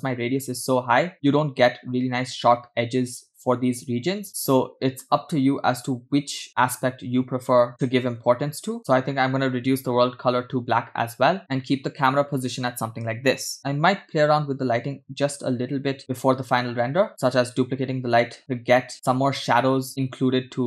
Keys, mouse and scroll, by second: 0.1 scroll up 2, 4.2-5.4 scroll down 4, 6.4 click, 9.2 scroll down 3, 11.6-12.0 scroll down 2, 13.7 click, 14.3 shift+d.